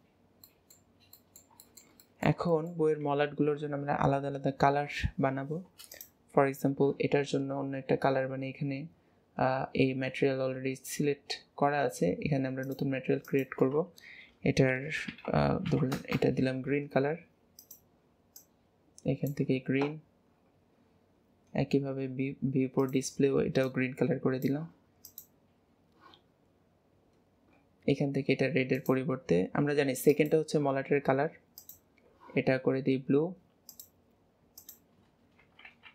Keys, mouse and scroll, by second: 0.1-0.4 scroll down 3, 0.4-0.9 middle drag, 0.9 scroll down 2, 1.1 middle click, 1.7-3.1 shift+middle drag, 3.1 ctrl+s, 4.0-4.4 scroll up 2, 4.4 scroll down 2, 5.9 click, 7.3-10.5 scroll up 3, 12.6-15.4 drag, 15.4 e, 17.6 click, 19.7-20.2 scroll down 2, 20.7 scroll up 1, 20.8 scroll down 2, 22.8 click, 25.0 click, 26.4-26.7 scroll up 2, 27.5-27.8 scroll up 10, 28.8 click, 31.6 click, 33.8-35.9 drag.